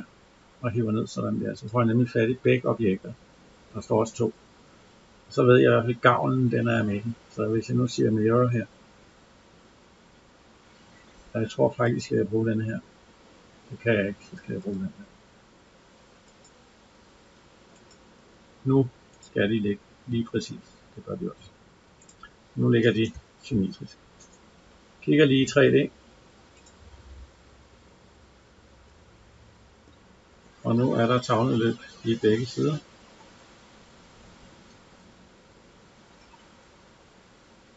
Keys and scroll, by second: 22.7 Escape.